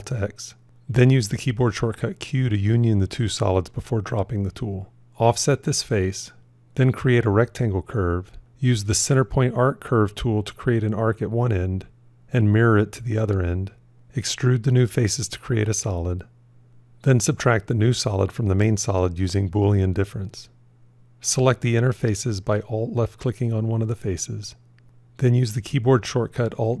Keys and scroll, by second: 1.2 q, 12.2 alt+x, 18.3 q, 25.2 alt+d.